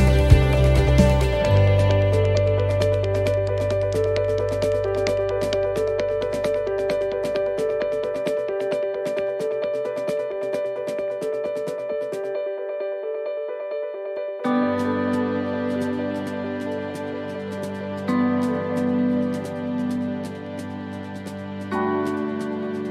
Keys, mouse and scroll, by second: 1.1 click, 2.2 middle click, 2.8 right click, 4.4 l, 5.2-6.3 l, 9.0 x, 11.1 click, 12.0 middle click, 13.0 click, 15.0 click, 19.2 middle click, 20.2 s, 21.8 click.